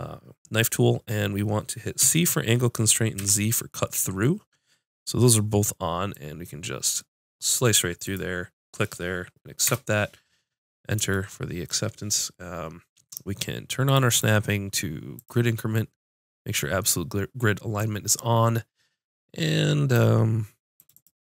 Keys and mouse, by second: 6.2-10.4 middle drag, 10.6 click, 11.1-13.8 middle drag, 13.8-15.4 drag, 17.8-19.9 drag, 20.8-21.2 drag.